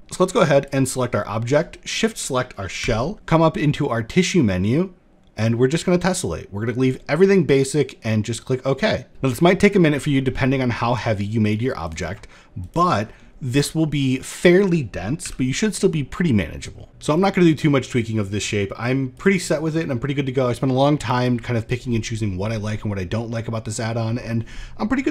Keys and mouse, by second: 2.4 n, 5.4-9.1 drag, 9.5 shift+middle drag, 10.6 click, 12.2 click, 12.8 shift+middle click, 13.4 middle drag, 14.8 n, 15.4-16.3 middle drag, 18.7 click, 22.9-23.4 middle drag.